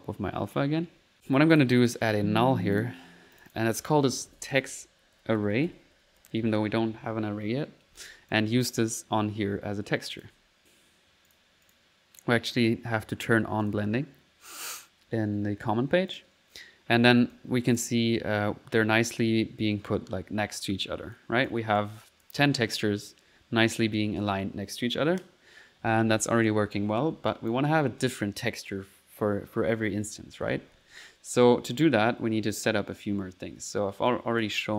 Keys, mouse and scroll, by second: 0.9 typing, 1.1 middle click, 1.6 click, 2.2 alt+n, 2.8 alt+click, 3.4 alt+click, 8.3 click, 10.1 click, 10.3 1, 11.3 click, 12.6 click, 13.7 click, 16.1 click, 17.0 middle click, 17.3 click, 21.2-22.5 drag, 27.3 click.